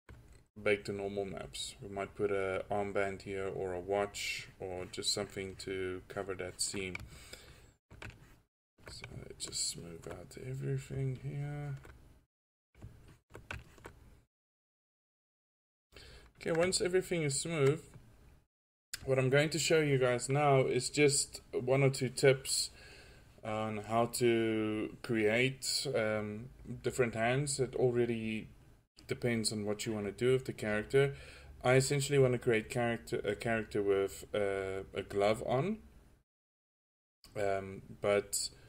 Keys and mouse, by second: 0.3 middle drag, 0.5 middle drag, 1.6 middle drag, 4.4-4.9 middle drag, 10.2-12.1 middle drag, 14.6 middle drag, 15.4 drag, 16.1-16.5 middle drag, 16.3 click, 16.8 click, 19.9-25.7 middle drag, 26.0-31.6 drag, 31.6 middle click, 31.7-33.3 drag.